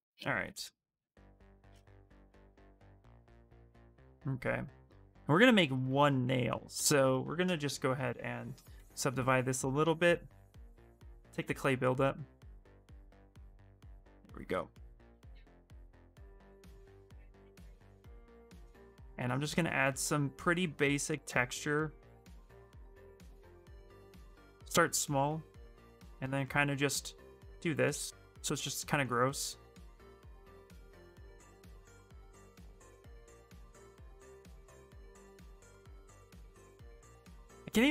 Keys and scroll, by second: 0.7 x, 1.5 q, 2.3 s, 4.7 s, 8.5 ctrl+d, 9.4 ctrl+d, 10.7-14.9 typing, 23.7 s, 36.7 ctrl+z.